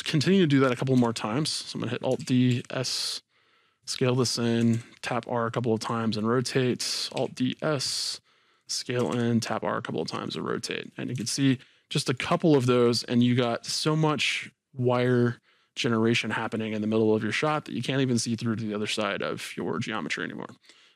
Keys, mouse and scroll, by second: 0.9 KP_1, 2.2 alt+d, 4.3-5.8 drag, 4.6 r, 6.9 alt+d, 8.6 click, 9.0 r, 10.4 click, 10.7-11.2 scroll down 2, 11.2 alt+a, 11.6-13.0 middle drag, 13.0-13.6 scroll up 2, 13.6 scroll down 2, 13.7-18.3 middle drag, 18.4-20.9 middle drag, 19.7-20.8 scroll down 2, 20.8 scroll down 1.